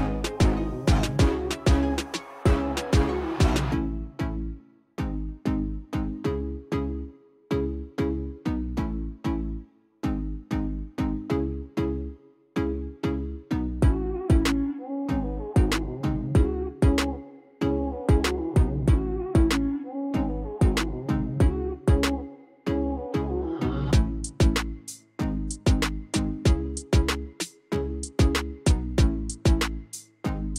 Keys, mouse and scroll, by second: 1.5 super+click, 2.6 super+click, 5.0 super+click, 7.7 super+click, 10.4 super+click, 12.2 super+click, 21.8 super+click, 26.9 super+click.